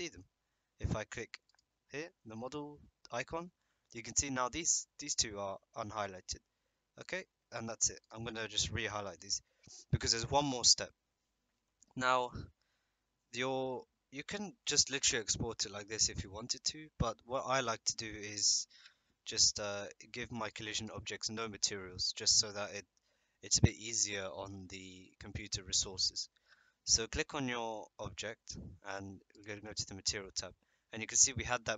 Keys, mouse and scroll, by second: 1.5 click, 8.0 click, 8.5 click, 9.2 click, 20.4 click, 20.7 click, 29.3 click.